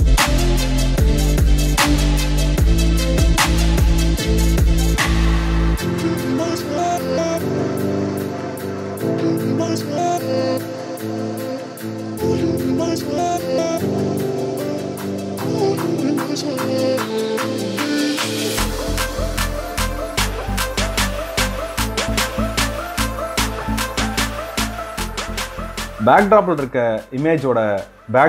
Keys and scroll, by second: 21.5 ctrl+space.